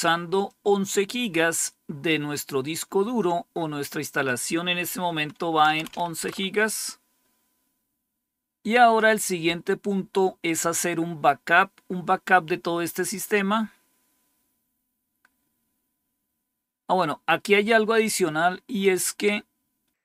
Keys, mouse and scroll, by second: 0.4-5.6 drag, 5.3-6.3 typing, 13.0-14.1 scroll down 2, 14.1-19.0 scroll down 1, 19.0-19.9 scroll down 1, 19.9-20.0 scroll down 2.